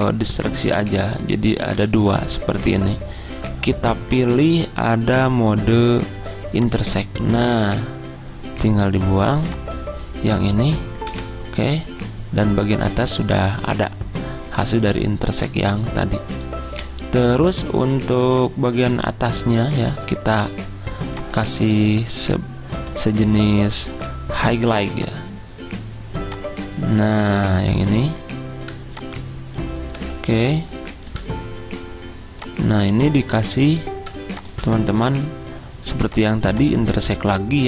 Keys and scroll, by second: 2.0 ctrl+z, 11.2 Delete.